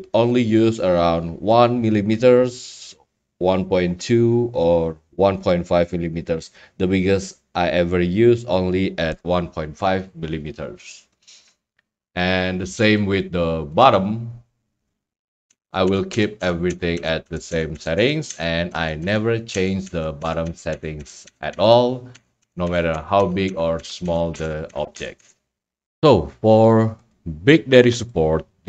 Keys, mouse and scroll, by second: 13.0 click, 13.8 click, 26.1-26.5 scroll, 27.1 click, 27.3 scroll, 27.6 scroll down 10, 28.0 scroll.